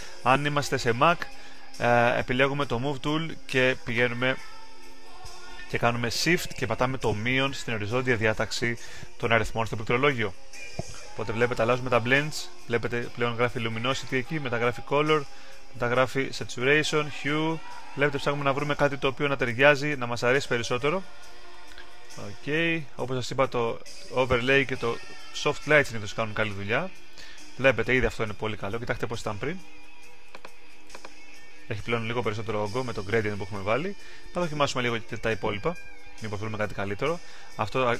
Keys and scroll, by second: 10.9 shift+-, 14.0 shift+-, 15.2 shift+-, 16.5 shift+-, 17.2 shift+-, 19.2-23.0 typing, 25.8 shift+-.